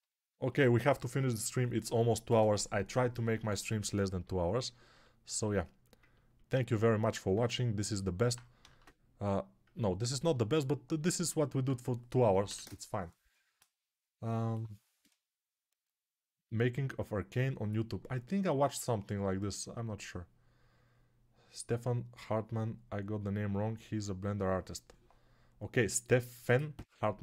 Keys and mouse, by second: 8.9 ctrl+space.